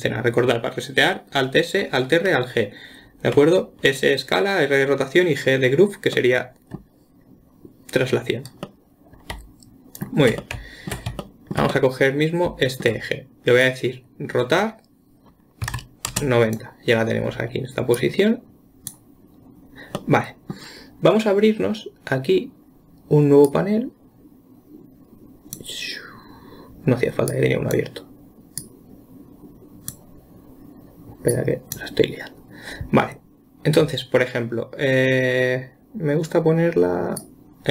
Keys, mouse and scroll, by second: 6.5-14.0 middle drag, 14.0 click, 18.4-20.4 drag, 20.4-23.4 middle drag, 23.9-26.9 drag, 27.7-37.7 drag.